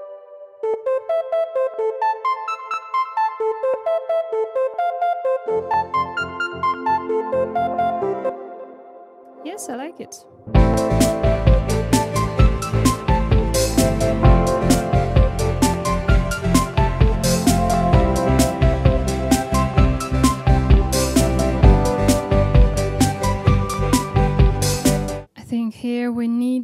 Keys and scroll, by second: 0.3 space, 8.2 space, 10.4 space.